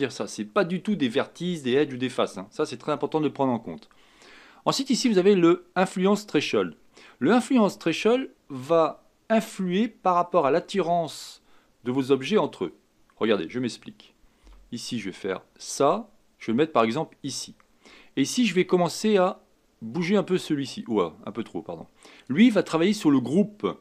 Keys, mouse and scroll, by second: 12.9-14.4 scroll down 4, 14.4 g, 18.9-22.1 drag, 22.8-23.5 scroll down 2, 23.5-23.8 scroll down 1.